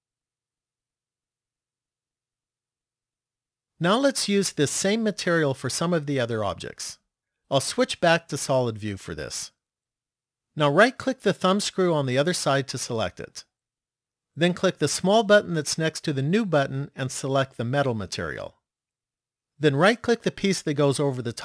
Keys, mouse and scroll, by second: 7.6 click, 12.2 right click, 14.8 click, 20.3 right click.